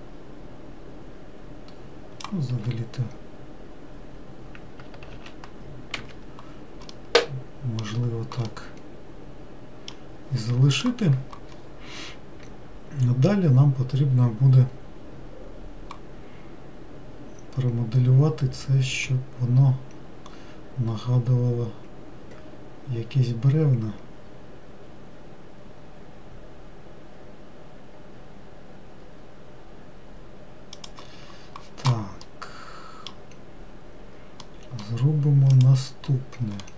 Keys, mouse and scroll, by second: 2.7 s, 7.2-11.9 middle drag, 32.5-34.0 middle drag, 34.0-34.7 scroll up 1, 34.7-35.8 middle drag, 35.8 click.